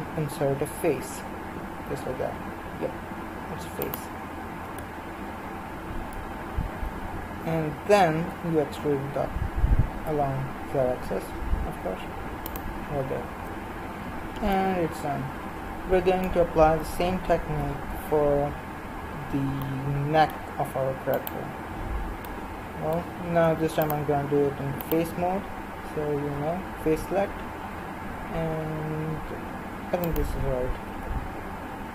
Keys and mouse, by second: 4.7 KP_1, 7.9 e, 13.2-15.1 middle drag, 17.0 KP_1, 21.2-29.7 right drag, 26.2 i, 30.9 KP_1.